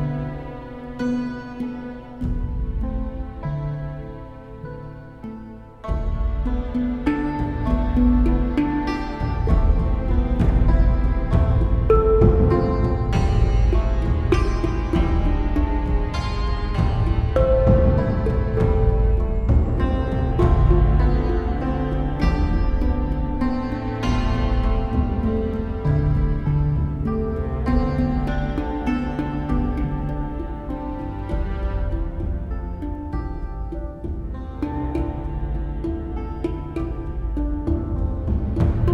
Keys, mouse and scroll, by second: 0.8 right click, 1.3 right click, 3.0 right click, 3.9 right click, 4.9 right click, 5.2 right click, 5.5 right click, 7.3 right click, 9.1 right click, 9.6 right click, 11.0 right click, 11.7 right click, 12.5 right click, 13.3 right click, 16.0 right click, 17.3 right click, 18.8 right click, 19.5 right click, 22.4 right click, 23.5 right click, 24.5 right click, 25.8 right click, 32.9 right click, 33.1 right click, 36.1 right click.